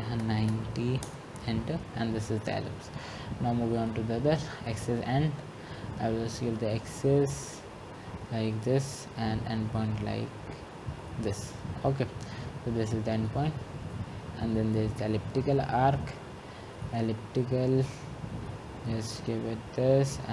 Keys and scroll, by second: 0.0-1.8 typing.